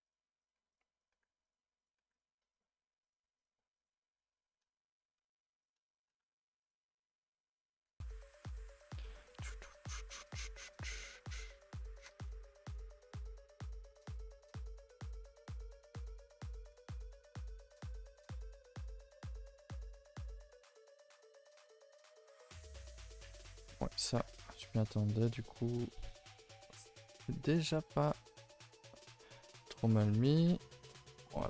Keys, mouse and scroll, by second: 0.0-3.5 typing, 0.4 click, 1.0 click, 1.8 click, 2.5 click, 3.3 click, 5.6 click, 5.8 shift+click, 6.2 g, 9.1 click, 9.5 shift+click, 9.8 g, 10.4 alt+click, 11.2 alt+click, 11.8 click, 12.2 shift+click, 12.4 s, 13.3 r, 14.2 click, 14.4 g, 15.5 click, 15.7 g, 16.4 a, 16.5 a, 16.8 ctrl+s, 17.2 middle click, 17.7-18.1 scroll up 2, 18.1-20.3 typing, 18.7 shift+middle click, 18.9 scroll up 4, 19.3 middle click, 19.8 scroll up 4, 20.5 middle click, 21.0-21.3 scroll up 2, 21.3-23.4 middle drag, 23.4 l, 24.0 g, 25.4-26.9 middle drag, 26.9-28.6 typing, 30.0 scroll down 1, 30.2 Tab, 30.2 middle drag, 30.5 a, 30.6 a, 30.7 scroll down 4, 30.9 middle drag, 31.1 ctrl+s, 31.2 middle drag.